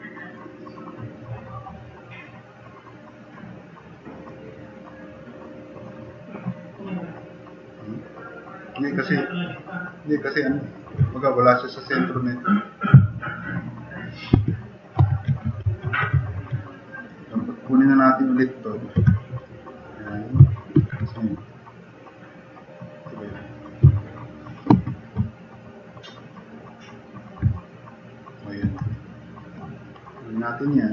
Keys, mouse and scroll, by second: 0.1-0.4 drag, 0.6 drag, 1.7-2.4 middle drag, 2.9-3.5 right drag, 4.1 click, 4.5 drag, 5.0-5.4 drag, 7.5-8.9 drag, 13.1-13.8 drag, 14.3 alt+q, 15.0 alt+q, 15.6 ctrl+Tab, 17.9 click, 19.0 4, 19.3 click, 20.8 alt+s, 22.9 click, 24.0-24.5 drag, 24.7 alt+s, 27.5-28.3 drag.